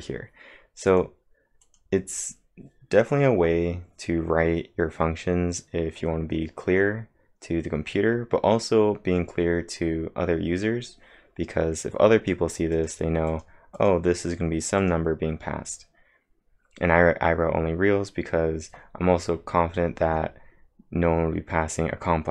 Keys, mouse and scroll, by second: 0.9 click, 1.7 click, 12.5-13.3 typing, 12.8 click, 13.5 click, 16.2 click.